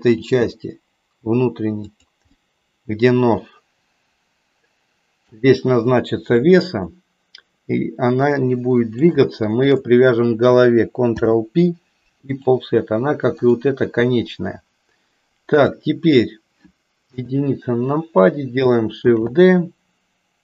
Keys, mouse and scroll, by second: 0.0 g, 2.4-5.4 middle drag, 6.4-9.0 middle drag, 9.3 shift+click, 11.0 ctrl+p, 13.3 click, 15.5 click, 17.2 KP_1, 19.0 shift+d.